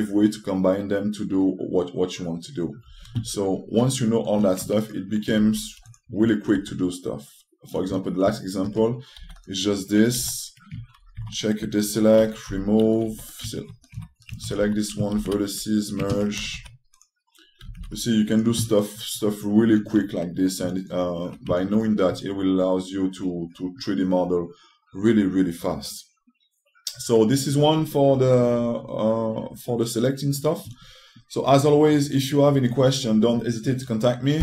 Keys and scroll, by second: 6.1 x, 7.2 2, 9.9 w, 18.3 s, 19.5 typing.